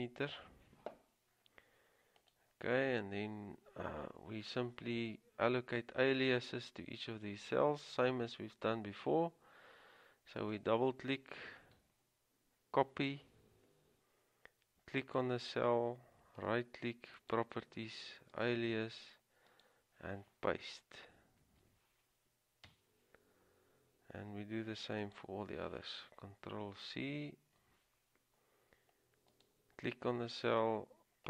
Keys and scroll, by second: 0.5 Return, 12.9 ctrl+c, 21.6 ctrl+v, 22.9 Return, 27.5 ctrl+c.